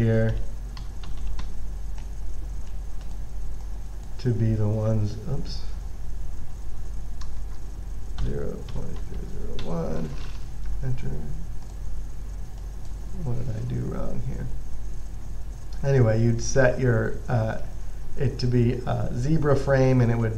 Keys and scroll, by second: 0.4-2.2 typing, 6.7-10.4 typing, 11.0 Return, 15.8 typing.